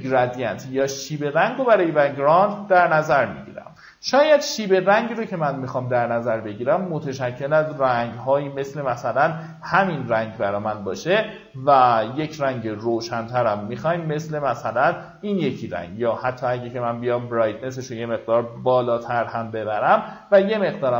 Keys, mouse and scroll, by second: 18.0 KP_9, 19.6-20.9 drag.